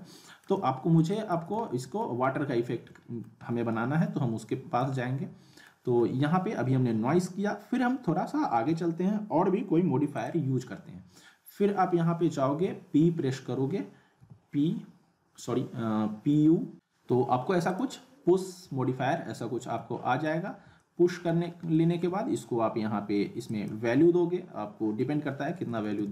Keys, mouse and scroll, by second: 1.0 click, 1.3 z, 1.7-2.3 alt+middle click, 2.2 scroll up 1, 2.6-3.3 alt+middle click, 3.4 scroll up 1, 3.7-5.9 alt+middle drag, 10.2 click, 12.6 typing, 16.5-17.2 typing, 17.7 click, 19.4-20.3 alt+middle click, 20.5 scroll up 1, 20.8-21.4 alt+middle click, 21.4 scroll down 1, 21.7 alt+middle click, 23.5 click.